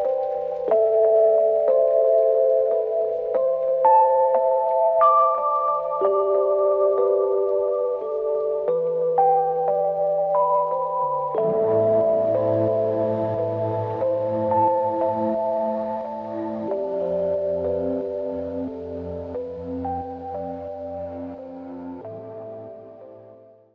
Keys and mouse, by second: 1.0-1.8 typing, 3.7 double click, 8.2 shift+click, 8.5 shift+double click, 9.7 ctrl+z, 10.5-12.0 typing, 12.5 shift+click, 13.7 ctrl+z, 13.8 ctrl+z, 14.4 ctrl+z, 15.3 shift+click, 16.2 shift+click.